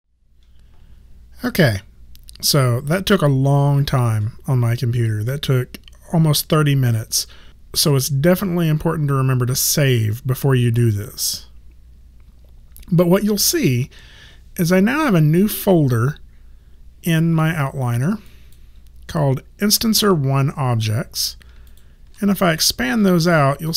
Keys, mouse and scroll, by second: 15.0 click, 18.2 click, 21.6 shift+click.